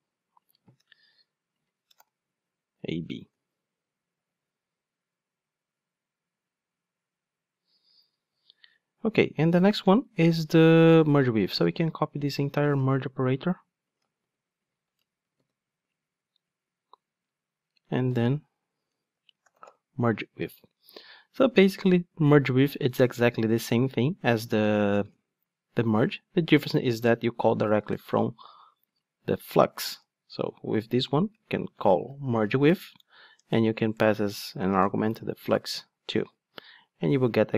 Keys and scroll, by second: 3.2 ctrl+shift+d, 14.2 super+c, 15.4 super+v, 32.4 Return.